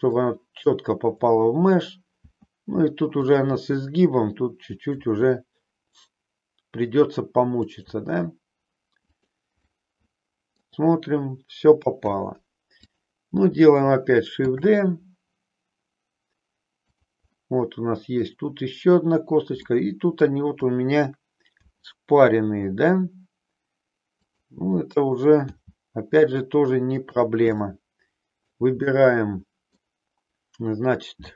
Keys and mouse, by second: 2.2 e, 3.3 click, 3.6 e, 4.8 click, 5.0 e, 7.8 click, 8.0 e, 9.6-10.7 middle drag, 12.7 click, 14.3 shift+d, 17.3 middle click, 19.6 middle click, 21.6 r, 24.2 click, 25.3 g, 27.1 click, 27.6 middle click, 28.8 middle click, 31.1 g.